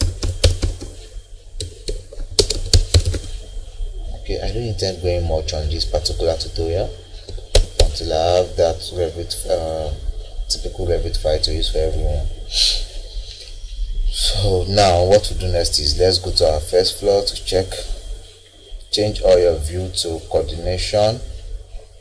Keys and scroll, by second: 0.0 BackSpace, 1.6-2.5 typing, 7.5 Escape.